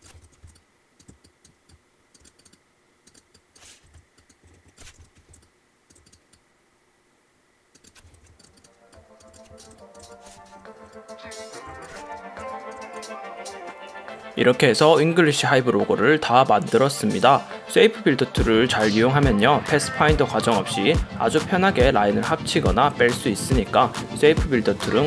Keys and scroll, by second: 0.3 super+0, 0.7 super+space, 3.9 Left, 4.5 Right, 5.0 super+0, 5.5 super+space, 8.1 super+0, 8.3 space, 9.7 space, 10.6 Right, 11.7 Left, 12.2 Tab, 12.5 super+space.